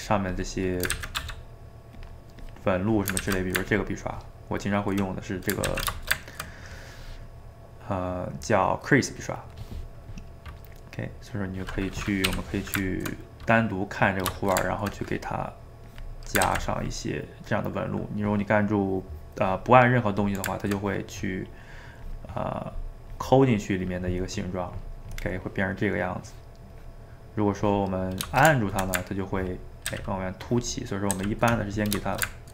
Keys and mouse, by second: 0.3 click, 1.0 ctrl+z, 1.2 f, 2.5 click, 3.2 ctrl+z, 3.7-5.7 ctrl+drag, 5.7 ctrl+z, 6.0-9.2 ctrl+shift+middle drag, 10.3-12.4 middle drag, 12.4 /, 12.9-15.9 ctrl+middle drag, 15.9 click, 16.6 ctrl+z, 16.8-19.8 drag, 20.9 click, 21.5 middle click, 22.0 click, 22.5 middle click, 23.1-24.4 drag, 24.4-26.8 middle drag, 26.8 click, 27.3-29.4 middle drag, 29.4 ctrl+click, 29.9 ctrl+z, 30.4 ctrl+click, 31.1 ctrl+z, 31.6-32.5 middle drag.